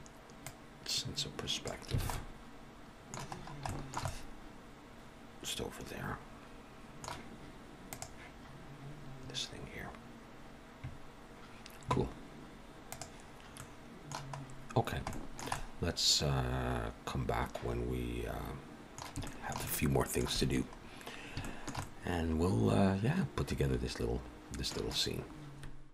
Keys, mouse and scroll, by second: 0.3 click, 1.9 alt+a, 2.0 middle click, 3.2-3.6 scroll up 3, 3.6 shift+middle click, 4.0 middle click, 13.4 middle click, 14.3-14.7 scroll up 1, 14.7-15.0 scroll down 2, 15.0 shift+middle click, 15.4 middle click, 19.2 shift+middle click, 19.6 middle click, 21.3 shift+middle click, 21.7 middle click.